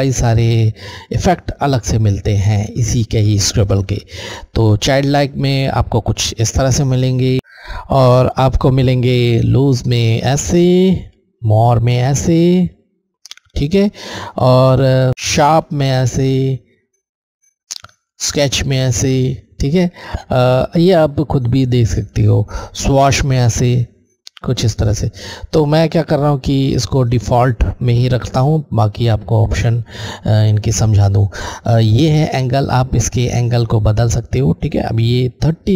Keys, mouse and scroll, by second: 5.2 click, 6.9 click, 8.1 click, 10.5 Left, 10.5 click, 13.8 Left, 17.6 click, 22.8 click, 24.9 click.